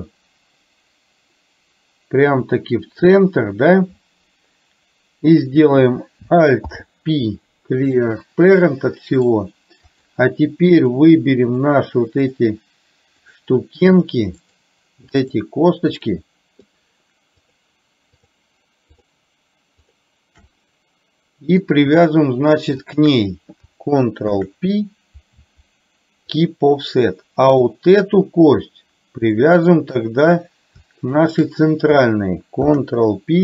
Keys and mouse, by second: 6.7 alt+p, 8.7 middle click, 10.0 click, 10.9 shift+click, 11.5 shift+click, 12.3 shift+click, 13.3 shift+click, 14.4 shift+click, 15.3 shift+click, 16.0 shift+click, 17.4 shift+click, 18.3 shift+click, 19.0 shift+click, 20.5-21.7 middle drag, 22.9 shift+click, 24.4 ctrl+p, 29.4 shift+middle click, 31.3 shift+click, 32.7 ctrl+p.